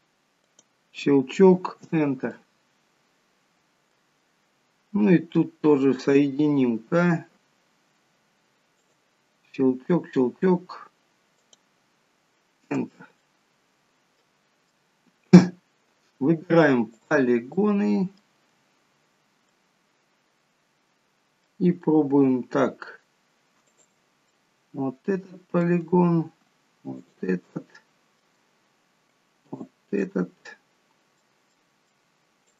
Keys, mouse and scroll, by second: 2.4 middle click, 6.5 k, 13.3 middle click, 15.5 scroll down 1, 17.0 click, 17.7 middle click, 19.6 middle click, 23.7 click, 24.4 middle click, 27.1 shift+click, 27.5 middle click, 29.5 shift+click, 30.1 middle click, 31.6 middle click.